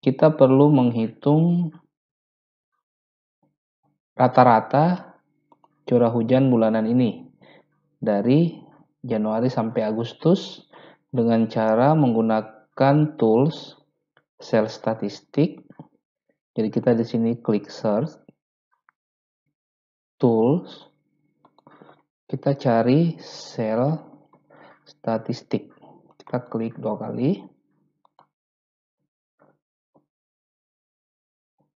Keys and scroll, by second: 22.3-24.5 typing.